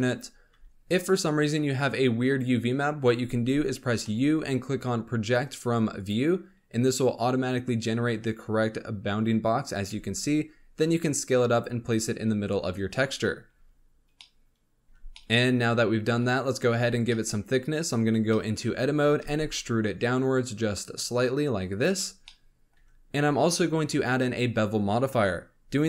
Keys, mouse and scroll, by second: 0.5 s, 0.7-3.5 scroll down 1, 3.5-4.0 scroll down 1, 4.0 u, 9.9 s, 13.4 Tab, 13.8-14.1 scroll up 2, 14.1-14.8 middle drag, 14.8 scroll up 1, 15.1-16.7 middle drag, 16.7 Tab, 17.0 middle click, 17.6-18.2 scroll up 1, 18.2 shift+middle click, 18.7-19.2 scroll up 2, 19.2 e, 22.1 scroll down 2, 22.2 middle click, 22.7 Tab, 23.1 scroll up 1.